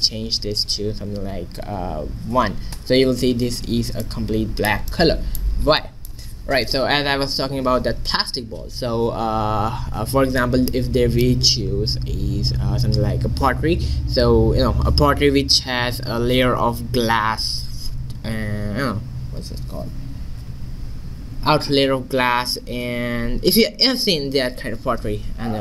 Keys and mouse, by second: 4.2 middle click.